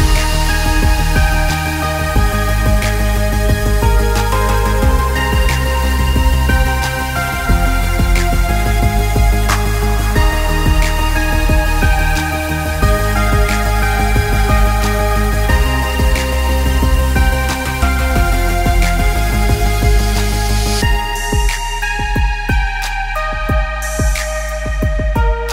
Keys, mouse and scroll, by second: 1.6 click, 1.9 click, 2.6 click, 4.0 shift+click, 4.5 middle click, 5.1 shift+click, 5.8 right click, 9.3 right click, 12.6 click, 13.2 middle click, 14.0 click, 14.9 shift+click, 15.7 right click, 17.0 right click, 18.5 middle click, 18.9 click, 20.0 shift+click, 20.5 shift+click, 21.4 right click, 22.6 right click, 23.4 right click, 25.2 click.